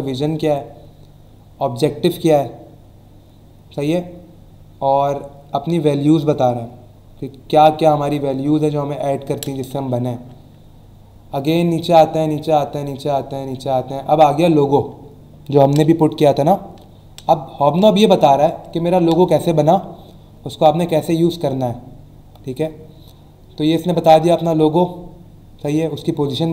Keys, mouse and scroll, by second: 0.2-0.8 scroll down 2, 2.1 scroll down 1, 2.6 scroll down 1, 9.2 scroll down 1, 10.2-11.2 scroll down 3, 11.9-12.8 scroll down 3, 13.4 scroll down 1, 13.9 scroll up 1, 22.1-22.7 scroll down 2.